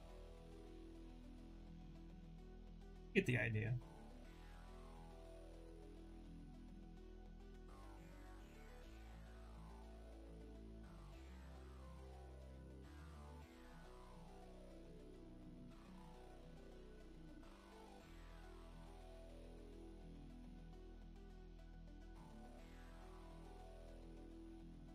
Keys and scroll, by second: 12.0 w.